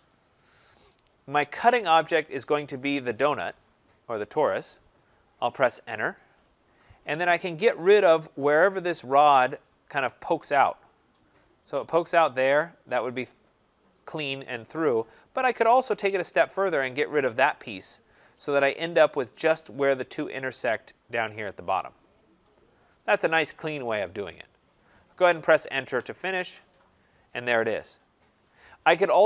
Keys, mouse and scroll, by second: 0.1 click, 2.4 click, 5.9 Return, 8.4 Return, 8.8 click, 10.2 click, 10.8 scroll up 2, 11.8 middle click, 12.9 scroll, 13.1 right click, 13.7 scroll, 14.5-15.1 scroll, 15.1 scroll, 16.9 click, 17.7 scroll, 18.5 scroll, 20.2 scroll, 22.5 scroll, 25.0 right click, 25.7 Return, 26.7 click, 27.2 scroll, 28.2-28.6 scroll.